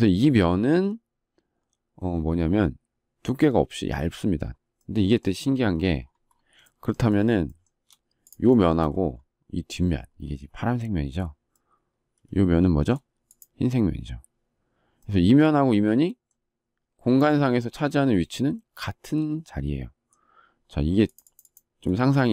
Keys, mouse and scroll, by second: 6.5 shift+middle click, 7.0 shift+middle click, 7.5 shift+double middle click, 8.6 shift+double middle click.